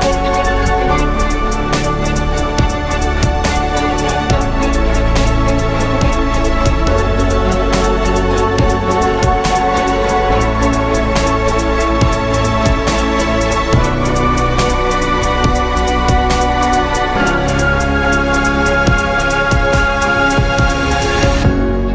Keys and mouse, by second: 3.6 z, 5.0 Tab, 5.3 a, 5.5 a, 6.1 shift+d, 8.1 z, 10.9 ctrl+Tab, 16.0 ctrl+b, 17.9 Tab, 18.3 ctrl+a, 18.7 Tab, 19.2 ctrl+b.